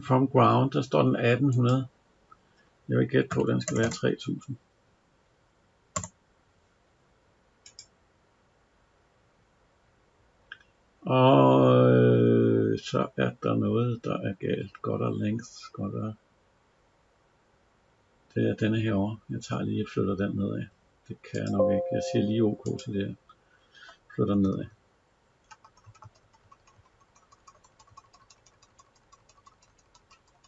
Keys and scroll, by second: 24.2 Down.